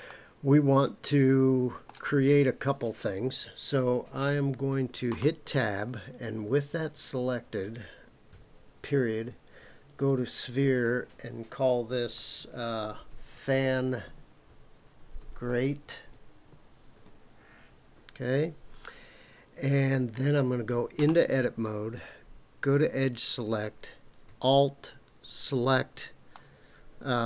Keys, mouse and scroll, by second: 0.1-1.9 middle drag, 5.1 Tab, 8.3 KP_Decimal, 9.8 click, 10.1-18.5 drag, 21.0 Tab, 23.0 click, 25.2 alt+click, 26.3-27.2 middle drag.